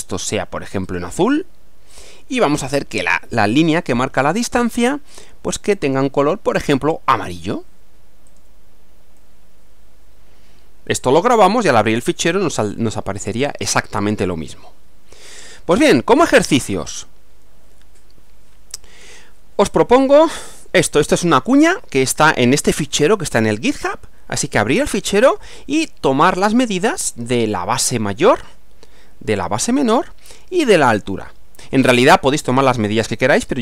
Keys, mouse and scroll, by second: 0.9 click, 1.9 click, 5.2 click, 5.8 click, 7.2 click, 8.3 click, 9.2-11.8 middle drag, 12.9-14.1 middle drag, 15.8 click, 19.2-20.6 drag.